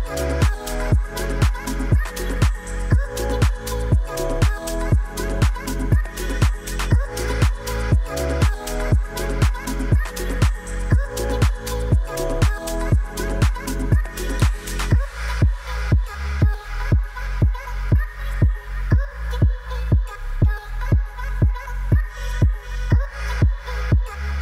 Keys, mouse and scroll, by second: 0.0 shift+click, 0.3 shift+click, 0.8 g, 1.0 y, 3.8 middle drag, 4.3 middle click, 4.8 g, 4.9 y, 6.2 KP_0, 6.8 click, 7.5 ctrl+s, 8.4 click, 8.9 g, 9.3 click, 10.9 shift+d, 11.7 click, 12.5 shift+d, 13.5 drag, 14.1 Tab, 14.3 Tab, 14.6 click, 15.1 ctrl+s, 17.5-20.7 middle drag, 20.7 click, 22.7-23.8 drag, 23.5 0.